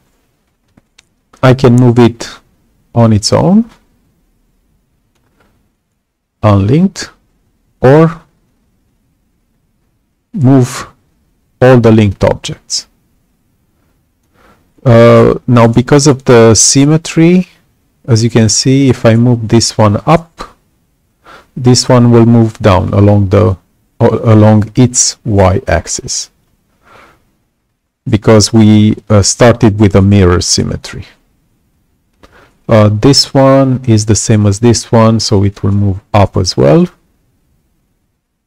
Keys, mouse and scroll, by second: 1.3-5.1 drag, 8.4-14.1 alt+drag, 35.3-38.4 alt+drag.